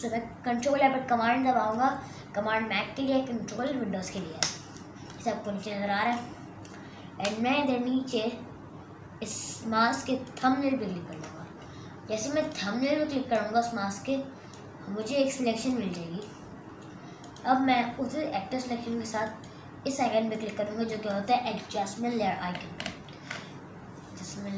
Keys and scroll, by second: 22.8 super+KP_Add.